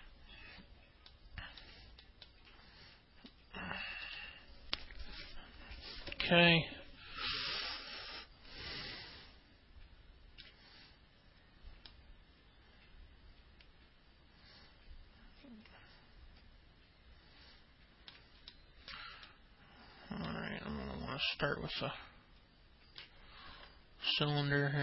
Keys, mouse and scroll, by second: 0.0 alt+middle click, 1.9 alt+middle click, 2.9 middle click, 4.1 ctrl+alt+middle click, 8.3-11.3 alt+middle drag, 12.8-18.9 alt+middle drag, 19.2 middle click, 20.0 alt+middle click, 22.7-23.8 alt+middle drag.